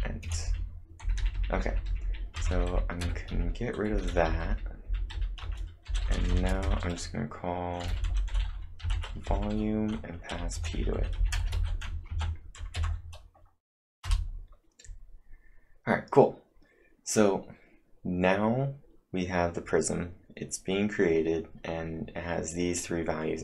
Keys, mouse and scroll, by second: 1.6-3.1 typing, 5.4 Return, 6.6-11.5 typing, 12.1 ctrl+`, 12.8 Up, 14.0 Return.